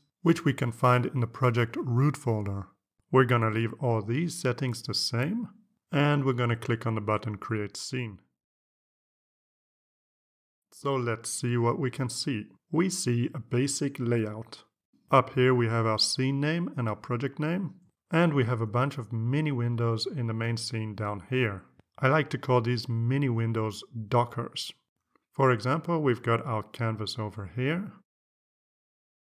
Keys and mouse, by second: 8.2 click.